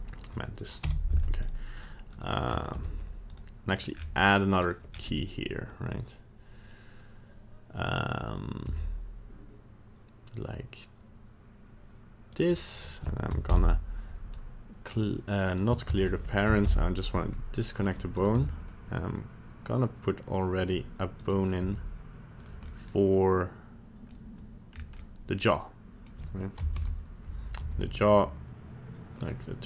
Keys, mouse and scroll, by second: 0.8 h, 1.4 right click, 1.8 right click, 2.1 right click, 2.4 scroll up 3, 2.8 Tab, 3.3 right click, 3.7 right click, 3.9-4.5 scroll down 3, 4.6 right click, 4.9-5.7 scroll up 1, 5.7 scroll up 1, 8.6 e, 12.7 right click, 13.5 alt+p, 15.9 ctrl+z, 16.6 alt+p, 18.2 right click, 18.3 g, 21.2 right click, 21.6 g, 22.6 middle click, 24.0 middle click, 24.7-25.0 scroll up 2, 25.0 middle click, 26.0 middle click, 26.6 KP_1, 26.7 KP_3, 27.6 g.